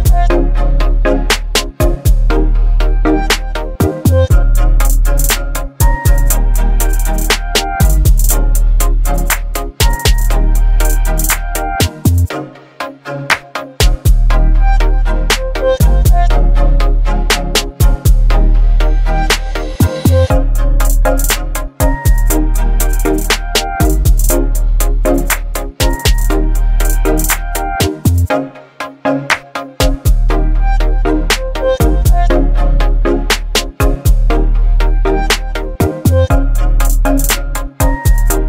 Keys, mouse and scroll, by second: 2.2-16.6 drag, 17.4 click, 20.0 click, 21.9 alt+BackSpace, 23.2 ctrl+d, 23.7 v, 25.7 click, 26.0 click, 27.4 right click, 28.3 click, 29.9 v, 30.2 ctrl+t, 32.5-34.4 drag.